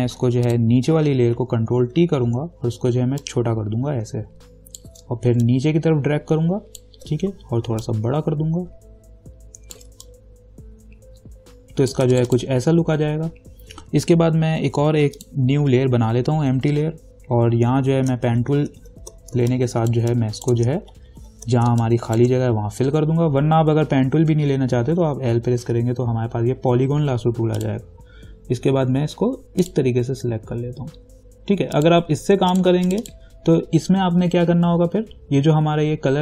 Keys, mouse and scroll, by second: 0.7 click, 2.0 ctrl+t, 3.4-5.6 alt+drag, 5.6-8.0 shift+drag, 8.0-10.2 alt+drag, 10.2-12.3 shift+drag, 15.4 click, 18.2 p, 18.6 ctrl+=, 19.6 space, 19.7 click, 20.1 space, 20.3 click, 20.3 space, 21.0 ctrl+=, 21.9 space, 22.0 click, 22.4 space, 25.1 l, 27.8 click.